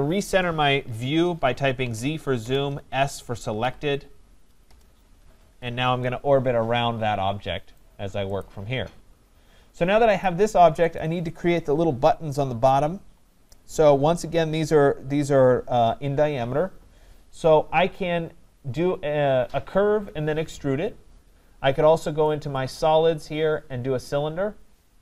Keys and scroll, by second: 2.4 Return.